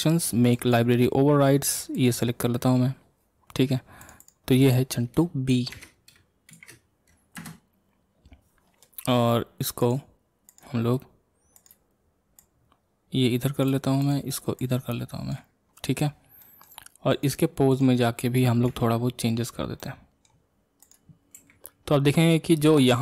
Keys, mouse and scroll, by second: 2.1 click, 4.2-7.4 drag, 9.9-10.6 drag, 12.5 click, 15.7-16.4 scroll up 1, 16.4-17.2 middle drag, 17.2 click, 17.8 click, 18.7 ctrl+Tab, 19.8-21.0 middle drag, 21.0 click, 21.4 r.